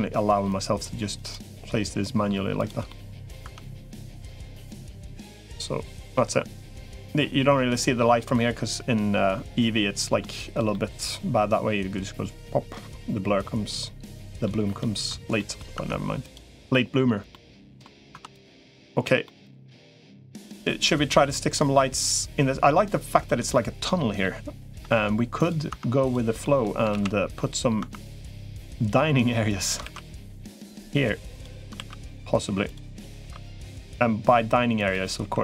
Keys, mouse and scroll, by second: 1.4 middle click, 2.7 middle click, 3.2 Tab, 3.8 click, 4.1 middle click, 4.9-6.0 middle drag, 6.7-10.0 middle drag, 10.5-14.3 middle drag, 14.6 shift+middle click, 15.2 middle click, 15.6 Tab, 17.1 middle click, 18.0 Tab, 18.2 click, 19.1 middle click, 20.4 middle click, 21.6-23.2 middle drag, 23.7 middle click, 24.6 Tab, 25.6 Tab, 25.8 click, 26.4 middle click, 26.8 ctrl+s, 27.6 Tab, 29.6 ctrl+r, 31.6 ctrl+r, 33.0 ctrl+r, 35.2 3.